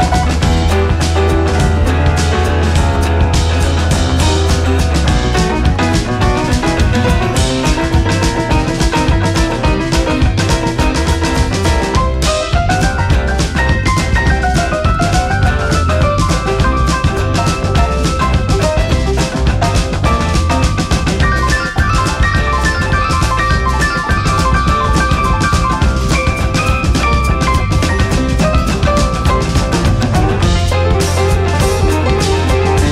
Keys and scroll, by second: 17.9 ctrl+-.